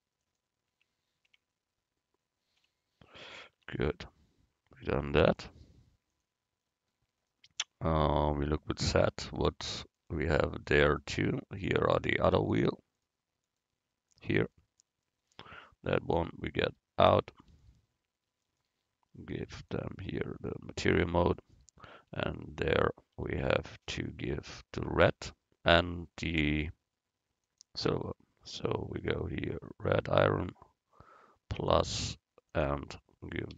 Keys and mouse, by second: 0.8 Escape, 1.3 Escape, 2.6 z, 3.6 Tab, 6.3 click, 9.3 z, 11.7-14.8 right drag, 16.7-18.3 drag, 18.3 middle click, 19.6-21.6 drag, 23.2 Tab, 26.3-29.4 drag, 31.6-33.5 drag.